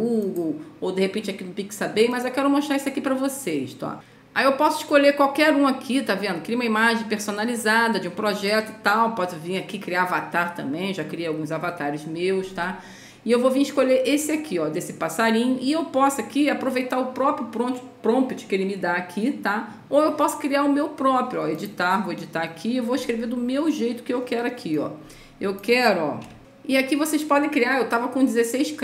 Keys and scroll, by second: 26.4 BackSpace.